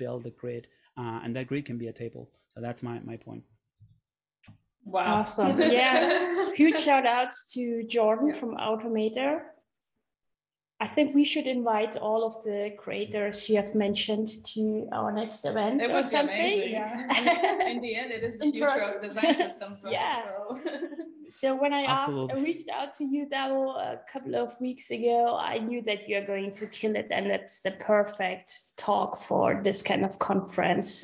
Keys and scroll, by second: 4.0 super+Tab, 9.4 super+Tab, 21.2 r.